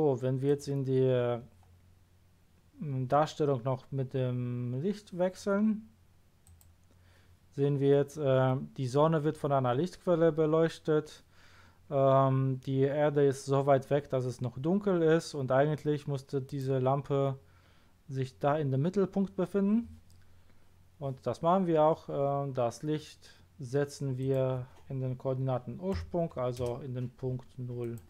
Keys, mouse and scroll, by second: 0.4 click, 6.4 click, 7.9-8.4 middle drag, 16.4 click, 24.2 click, 25.9 KP_0, 26.6 Return, 27.8 click.